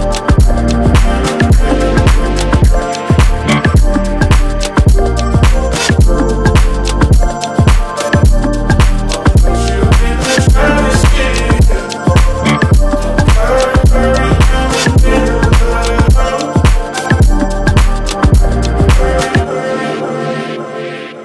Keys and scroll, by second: 14.9 ctrl+z.